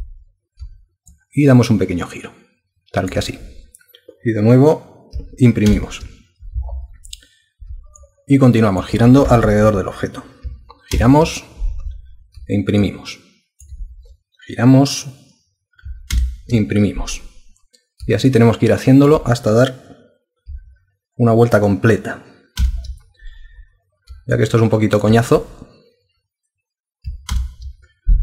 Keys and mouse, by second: 1.1 alt+click, 5.7 super+Print, 8.0 alt+click, 10.9 super+Print, 12.8 alt+click, 16.1 super+Print, 18.3 alt+click, 22.6 super+Print, 24.3 alt+click, 27.3 super+Print.